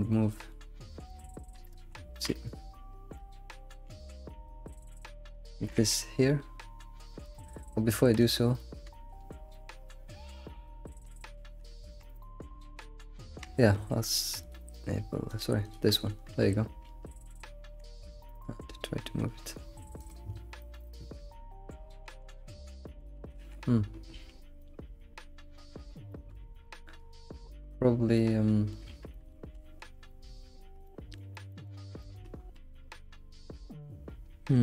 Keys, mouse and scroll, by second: 1.1 shift+click, 1.7 ctrl+z, 2.4 ctrl+click, 3.1-4.7 middle drag, 4.7 click, 5.0-5.6 middle drag, 5.6 g, 8.2 click, 8.6 middle click, 9.1 alt+shift+z, 9.5-11.4 middle drag, 11.4 alt+shift+z, 11.9 Tab, 13.4 Tab, 14.4 click, 15.3 click, 15.7 click, 16.9 alt+shift+z, 17.2 middle click, 17.8 g, 20.2-20.6 scroll down 3, 20.8 alt+middle click, 21.7 scroll up 1, 22.1 g, 23.3 alt+z, 23.7 scroll up 1, 23.8-24.5 scroll down 7, 24.1 alt+shift+z, 24.6-27.8 middle drag, 27.8-28.1 scroll down 1, 28.1 middle click, 28.9 alt+shift+z, 29.1 middle click, 29.6 alt+shift+z, 30.8 middle click, 32.0 shift+middle click, 32.4-32.8 scroll up 2.